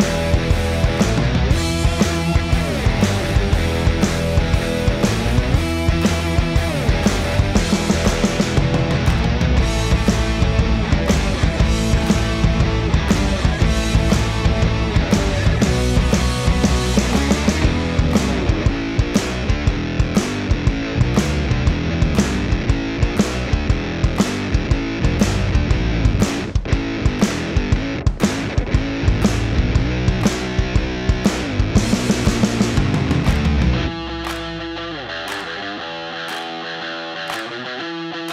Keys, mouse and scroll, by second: 5.3 click, 10.3 alt+[, 11.9 =, 12.1 =, 13.3-17.7 drag, 17.7 s, 18.5-25.9 drag, 23.6 0, 23.9 Return, 25.9 right click, 26.9-32.2 drag, 34.8 space.